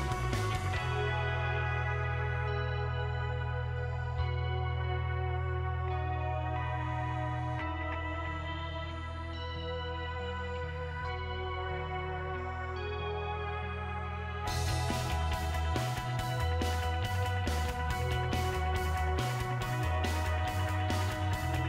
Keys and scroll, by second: 5.0 1, 6.1 BackSpace, 6.4 2, 7.3 BackSpace, 8.7-13.8 typing, 15.9 2, 16.8 BackSpace, 18.1-20.5 typing.